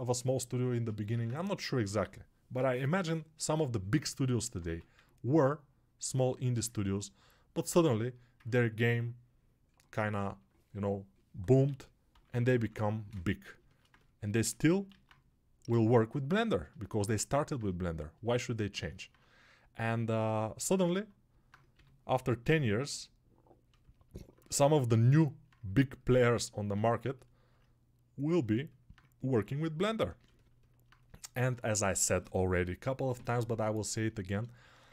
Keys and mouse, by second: 1.0 alt+q, 4.5 1, 8.0-34.9 alt+drag, 11.6 g, 12.0 ], 14.8 alt+q, 15.5 6, 21.6 g.